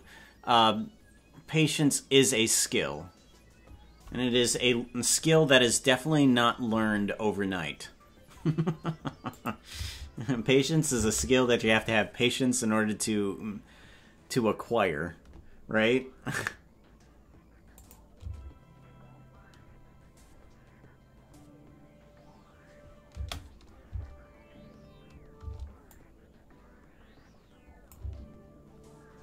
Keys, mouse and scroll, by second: 9.4 click, 11.0 space, 17.8 click, 23.2 space, 25.5 space, 25.9-28.3 drag, 28.0 space.